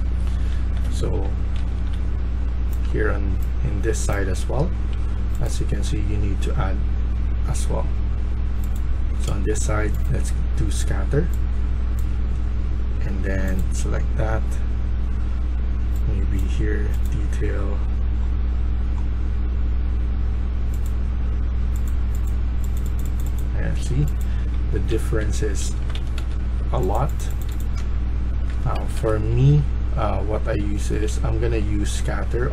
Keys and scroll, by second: 0.0-2.0 typing, 3.4-4.5 typing, 24.6-26.1 typing, 27.2-27.9 typing, 28.7 Escape, 28.9 Escape, 29.0-32.5 typing.